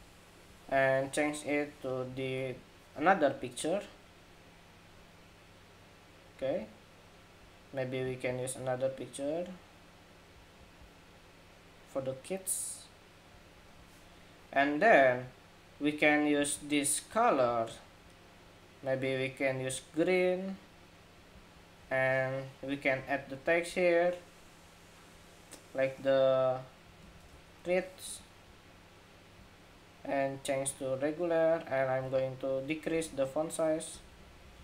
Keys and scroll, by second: 27.7 ⟲.